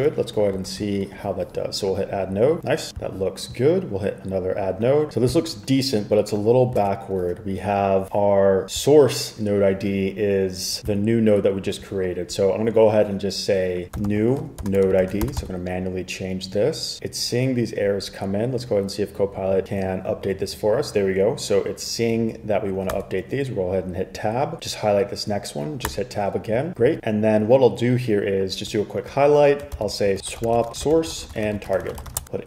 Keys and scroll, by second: 0.8 super+r, 6.9 super+Tab, 13.8-16.0 typing, 23.0 Tab, 26.0 Tab, 29.9 super+k, 30.0-32.4 typing.